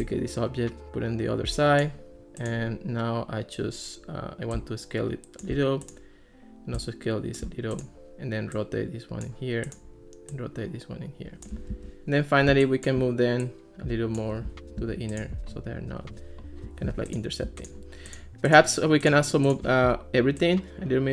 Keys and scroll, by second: 11.7 alt+r, 14.8 alt+r.